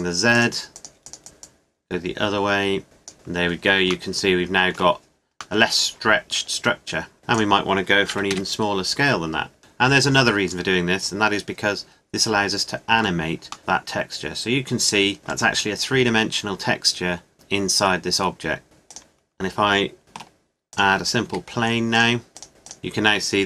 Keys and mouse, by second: 5.6-7.4 middle drag, 7.4-8.6 drag, 9.3 middle click, 11.2-13.6 middle drag, 15.8-18.6 middle drag, 18.6 click, 20.0 shift+a, 21.2 s.